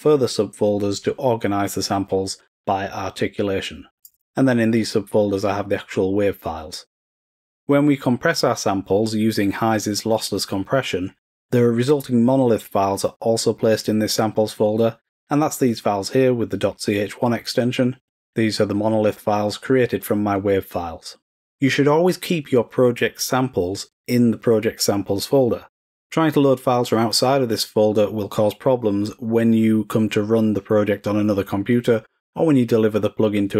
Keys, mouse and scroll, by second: 3.9 click, 4.0 click.